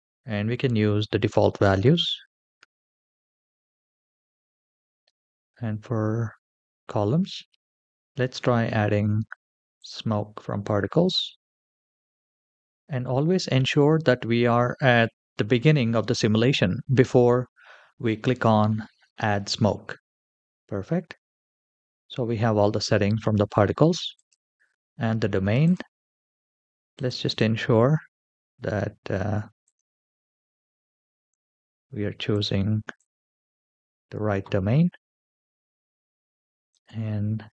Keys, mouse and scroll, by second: 3.3-5.2 scroll up 7, 9.5 click, 20.9-24.0 scroll down 4, 24.0 click, 25.4-27.4 drag, 36.4 click, 36.9-37.5 scroll down 1.